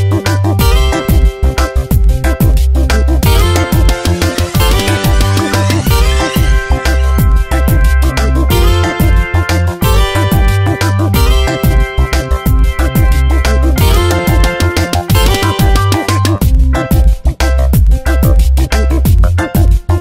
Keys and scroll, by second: 1.0 space, 2.7 space, 4.5 space, 7.0 space, 9.0 space, 11.2 space, 13.6 space, 15.8 ctrl+z, 17.3 space, 18.8 ctrl+z.